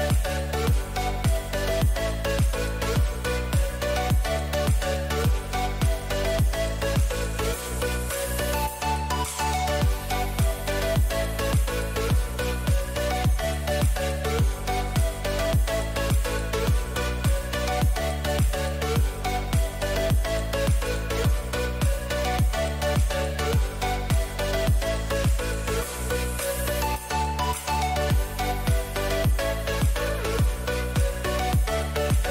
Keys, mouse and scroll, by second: 2.8 a, 4.0 b, 5.4 g, 8.5 a, 8.7-11.7 middle drag.